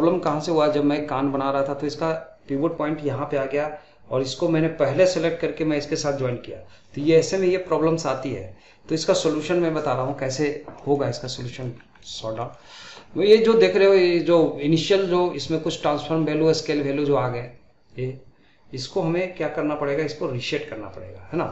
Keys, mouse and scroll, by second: 10.8 middle click, 11.2 scroll up 1, 11.4 middle click, 11.7 scroll down 1, 12.0-15.4 middle drag.